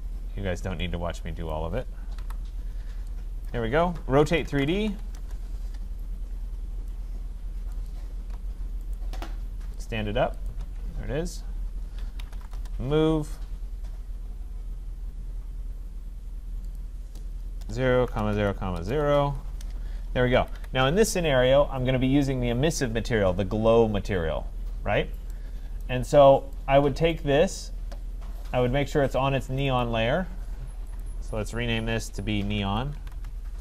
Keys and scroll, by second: 2.2 Delete, 5.1 Return, 12.5 Return, 19.2 Return, 20.3 Escape.